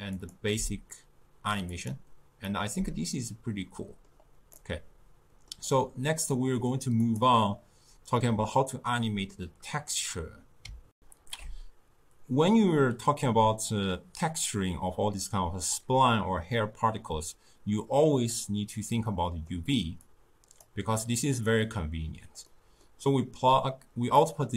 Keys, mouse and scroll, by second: 2.5-7.1 middle drag, 7.1 click, 11.0 ctrl+alt+shift+q, 19.1-20.1 middle drag, 20.1 drag, 21.1 click, 22.5-24.5 middle drag.